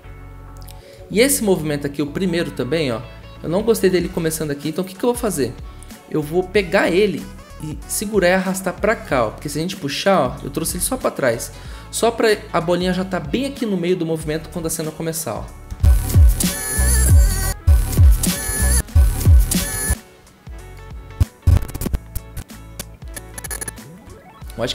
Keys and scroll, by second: 10.8 ctrl+z, 15.7 0, 17.2 0, 18.4 0.